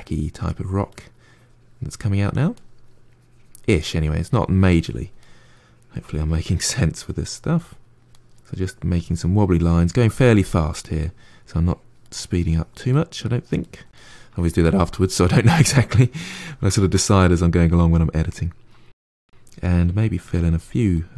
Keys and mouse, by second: 0.1 click, 0.5 middle click, 0.8 click, 1.6 middle click, 1.9 click, 2.3 middle click, 2.6-3.8 drag, 3.8 middle click, 4.1-5.1 drag, 5.1 middle click, 5.5 click, 6.3 middle click, 6.6 click, 7.2 middle click, 7.5-8.9 drag, 8.9 middle click, 9.3 click, 9.7 middle click, 9.9 click, 10.3 middle click, 10.6 click, 10.9 middle click, 11.3 click, 11.7 middle click, 12.1 click, 12.5 middle click, 12.9 click, 13.2 middle click, 13.6 click, 14.0 middle click, 14.3 click, 14.6-18.3 middle drag, 18.3-20.4 drag, 20.4 middle click, 20.7 click, 21.0 middle click.